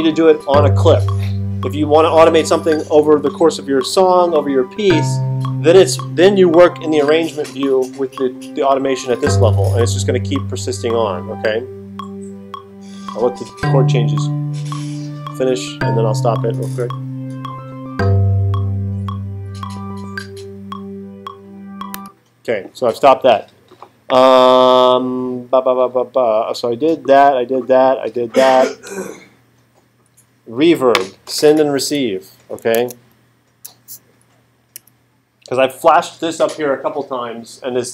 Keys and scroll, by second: 32.8 super+Tab, 34.7 Right.